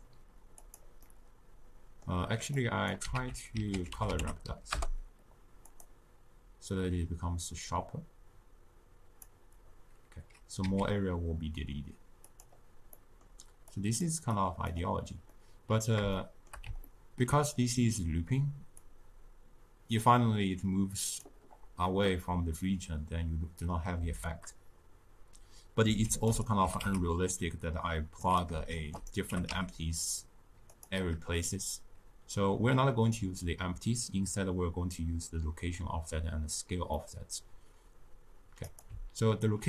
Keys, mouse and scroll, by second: 1.0-2.6 middle drag, 2.6-4.7 drag, 4.7 ctrl+a, 6.7-10.6 drag, 10.6 s, 13.7-15.3 drag, 15.3-18.8 middle drag, 18.8-26.0 drag, 26.0 shift+d, 26.6 g, 28.7 shift+d, 29.2 g, 38.8 click.